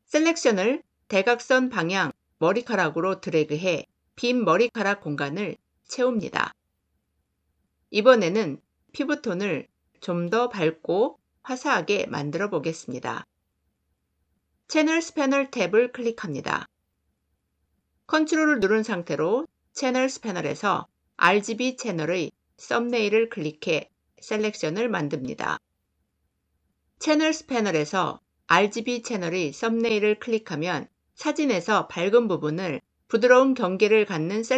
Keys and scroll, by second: 6.5 ctrl+d.